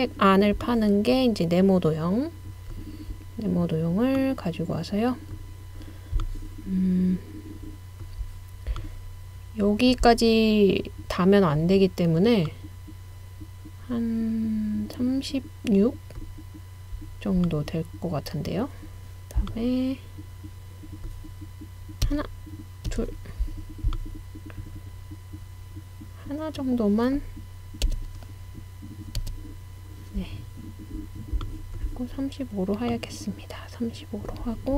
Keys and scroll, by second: 22.1 Right, 22.9 Right, 27.8 Left, 29.2 Right.